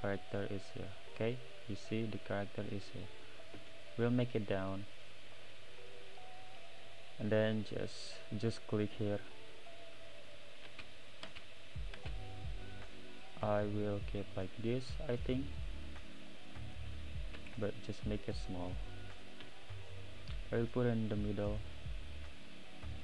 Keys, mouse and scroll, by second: 0.4-0.9 scroll down 7, 0.9-2.1 middle drag, 2.1-3.6 scroll up 2, 3.6 s, 5.2-6.4 middle drag, 6.4-6.9 scroll up 3, 6.9-9.3 middle drag, 9.3 click, 10.7 space, 11.2 space, 11.9 space, 12.9-14.9 middle drag, 14.9 click, 16.3-17.4 middle drag, 17.4 s, 18.3-19.6 middle drag, 20.8 click, 22.4-23.0 middle drag.